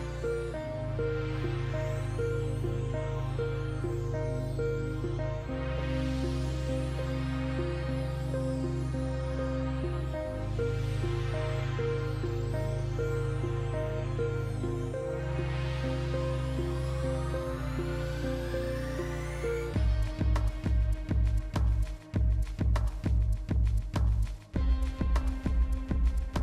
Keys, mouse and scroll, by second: 1.8 ctrl+j, 2.4-26.4 drag.